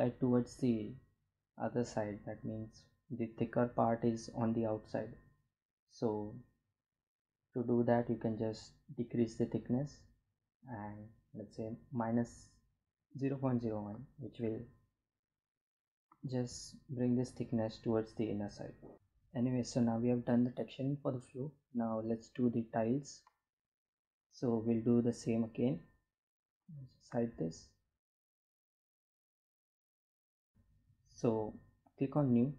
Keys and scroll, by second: 32.3 g.